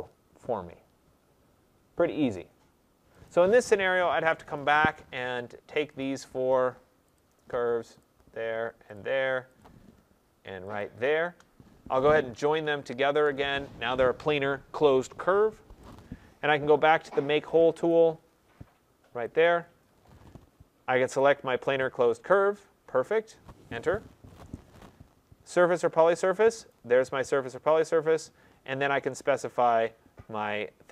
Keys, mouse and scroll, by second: 3.2 click, 4.5 click, 6.0 shift+click, 7.1 shift+click, 8.0 shift+click, 8.9 click, 9.5 click, 10.7 click, 17.3 click, 17.3 typing, 17.8 click, 19.3 click, 21.2 click, 24.1 Return, 26.6 click.